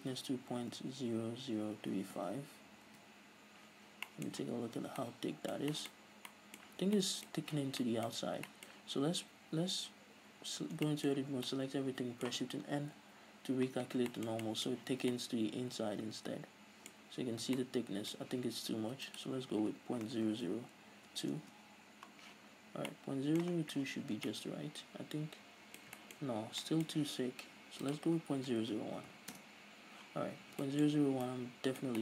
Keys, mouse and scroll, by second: 3.3 Return, 4.4-19.4 middle drag, 4.6 z, 5.0 scroll down 2, 6.3 scroll up 2, 6.9 z, 7.8 z, 8.3-8.7 scroll up 2, 10.7 scroll down 2, 10.9 Tab, 13.3 shift+n, 15.0 z, 19.4-23.2 drag, 20.7 KP_0, 21.8 Return, 22.8-23.2 scroll down 2, 23.2-28.2 middle drag, 23.8-24.1 scroll down 2, 24.1 z, 24.4 Tab, 26.5-26.9 scroll up 2, 28.2-29.8 drag, 29.2 KP_0, 29.8 Return, 30.6 a, 30.9-32.0 middle drag, 31.2-31.5 scroll up 2.